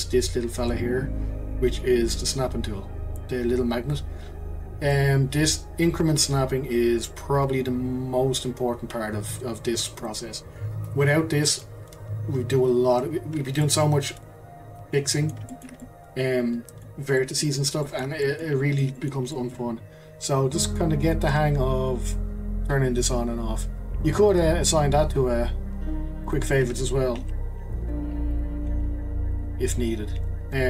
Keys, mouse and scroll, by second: 4.9-8.0 drag, 13.6-21.0 middle drag, 21.0 click, 24.3-27.2 right drag, 27.2 q, 28.8 q.